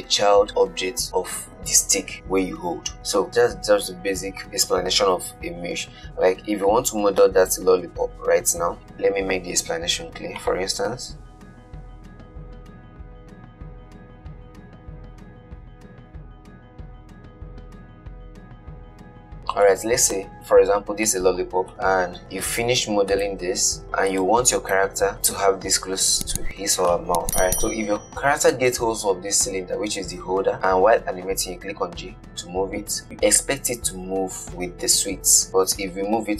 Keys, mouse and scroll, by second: 8.8 shift+a, 11.4-14.6 typing, 15.1 scroll down 1, 15.1 shift+middle click, 15.3 scroll up 1, 15.4 shift+middle click, 15.7 shift+right click, 15.9 shift+a, 18.0 s, 19.9-25.0 middle drag, 25.0-27.5 right drag, 27.5-28.7 middle drag, 28.7 click, 32.2 g.